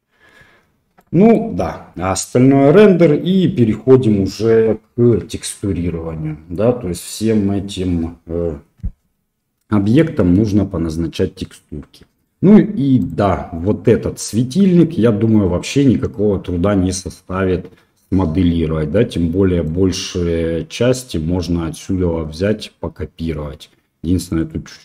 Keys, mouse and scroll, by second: 0.9 click.